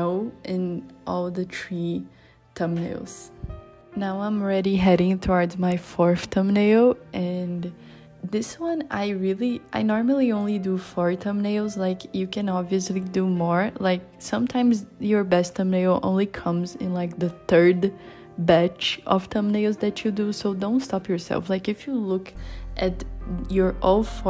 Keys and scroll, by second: 9.5 super+z, 12.3 super+z.